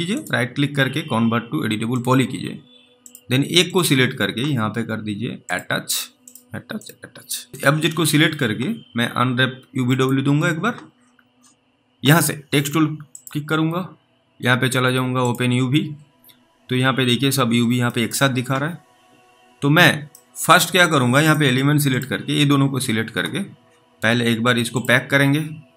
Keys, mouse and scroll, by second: 0.2 right click, 17.2-18.0 scroll down 3, 18.2 middle click, 20.4 middle click, 21.3 click.